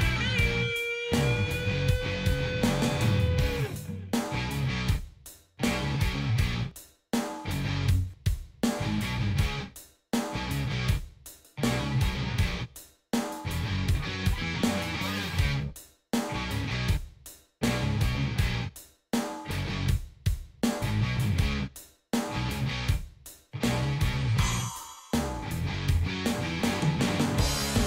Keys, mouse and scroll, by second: 0.8 right click, 4.4 click, 5.9 click, 6.4 click, 8.1 click, 9.7 click, 10.3 click, 12.6 click, 15.3 click, 18.9 click, 21.4 click, 23.3-25.5 drag, 26.5 shift+5, 27.7 click.